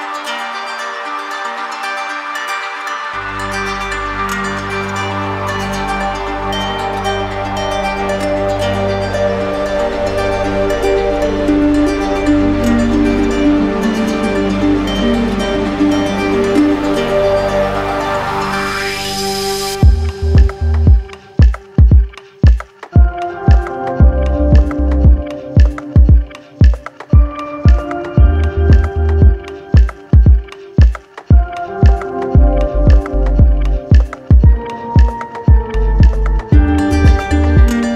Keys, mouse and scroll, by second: 5.1-6.2 drag, 8.3-9.4 drag, 12.0-13.1 drag, 14.7 click, 15.4 click, 15.9 alt+click, 19.9-22.0 drag, 24.0-25.0 drag, 25.9 click, 26.9 click, 29.1 click, 30.2 alt+click, 34.2 click, 35.4 click, 36.0 click.